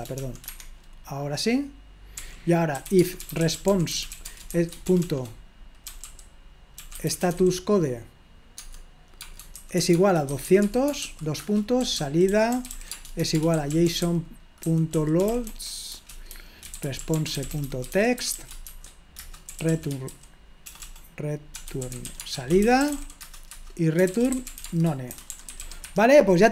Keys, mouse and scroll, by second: 0.0-0.7 typing, 2.2-7.8 typing, 8.6 Tab, 9.2-20.1 typing, 21.4-26.0 typing, 23.5 Return.